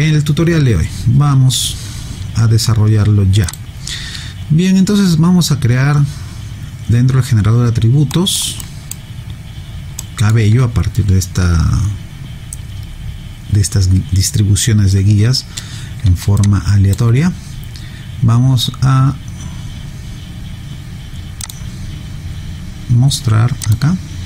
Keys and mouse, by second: 3.5 click, 8.1 alt+middle click, 8.6 alt+right click, 10.0 alt+middle click, 16.4 alt+click, 21.4 click.